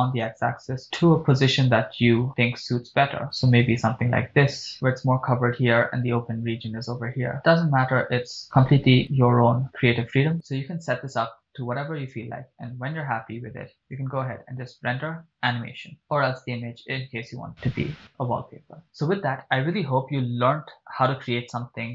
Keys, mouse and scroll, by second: 4.7 click, 9.6-10.3 scroll up 3, 10.3-10.9 scroll down 3, 14.3-18.9 drag.